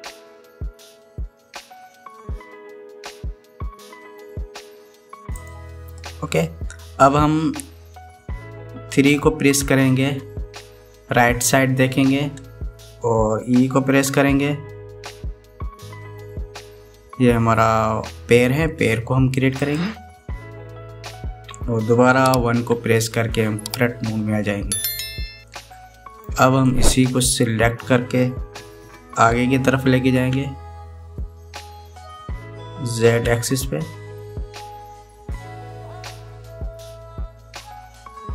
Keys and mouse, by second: 10.8 KP_3, 15.1 e, 23.3 KP_1, 26.2 shift+click, 27.4 click, 30.9 e.